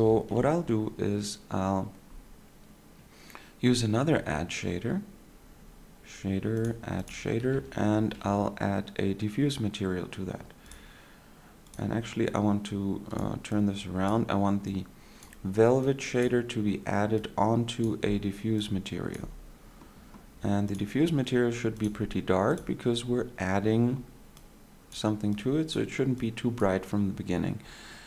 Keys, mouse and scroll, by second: 0.0 click, 0.0 shift+a, 7.9 shift+a, 17.8 click, 27.3 click.